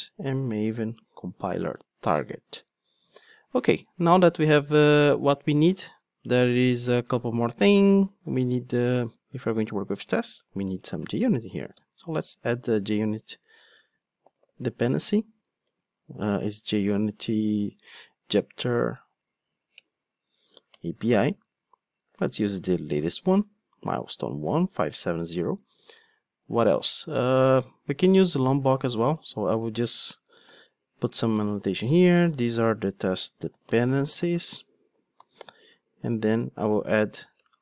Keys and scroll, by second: 1.8 super+d, 12.2 Return, 19.8 Return, 29.6 Tab, 31.3 super+/, 35.1 alt+super+l.